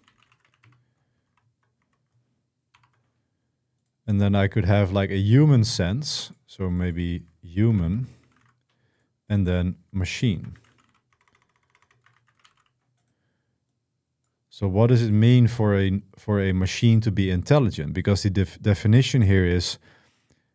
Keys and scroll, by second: 0.0-2.5 typing, 7.9-8.6 typing, 9.8-12.8 typing.